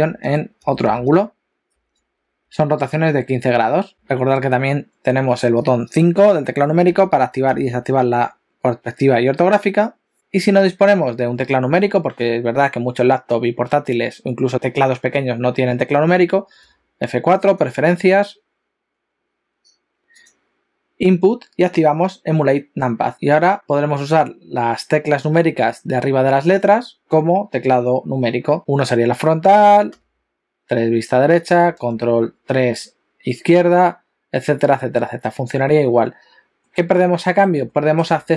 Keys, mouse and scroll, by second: 0.0-3.9 typing, 6.9 KP_5, 7.5 KP_5, 10.2 shift+middle click, 10.2-10.5 scroll down 2, 16.7 F4, 23.6 click, 28.6 KP_1, 29.9 KP_3, 31.9 ctrl+KP_3, 36.7 middle click, 37.7 shift+middle click.